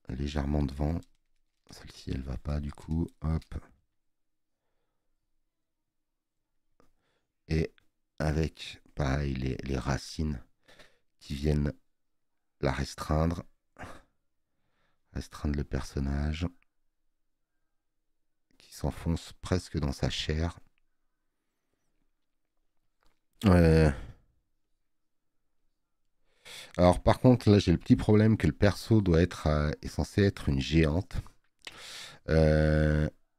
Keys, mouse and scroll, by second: 22.9 space, 22.9 click, 27.7 click, 30.3 click, 30.3 space, 32.1 space.